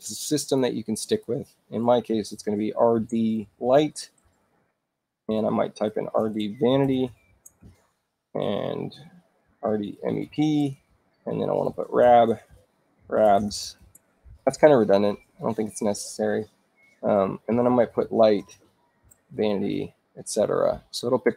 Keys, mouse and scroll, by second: 1.0 click, 1.8-4.0 typing, 5.2 shift+Return, 5.6-7.6 typing, 9.1-13.2 typing, 10.8 shift+Return, 13.7 shift+Return, 17.1-20.1 typing.